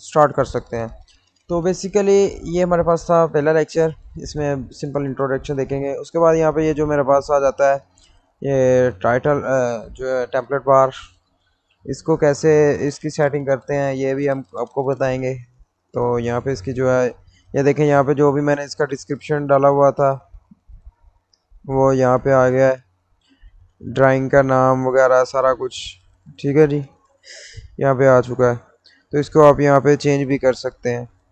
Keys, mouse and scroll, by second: 2.8-6.1 middle drag, 6.1-6.9 scroll up 1, 6.9-17.2 middle drag, 17.2-17.5 scroll up 1, 18.7-20.8 middle drag, 20.8 click, 26.4-27.0 scroll up 1, 28.9 scroll down 1, 29.3-31.3 drag.